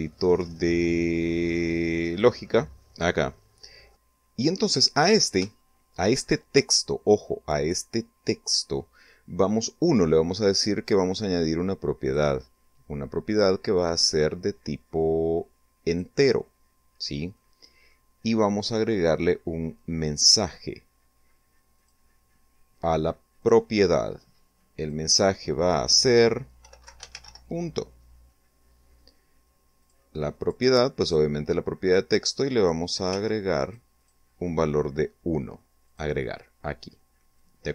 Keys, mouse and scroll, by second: 2.7 click, 3.9 middle click, 4.2 shift+middle click, 10.7 click, 11.9 click, 14.5 click, 16.0 middle click, 17.2 click, 18.6 click, 20.4 click, 22.1 click, 23.5 click, 25.0-26.4 typing, 28.4 click, 29.0 click, 29.7 click, 30.5 click, 31.8 1, 32.3 click, 32.7 click, 34.5 click, 36.0-37.7 drag.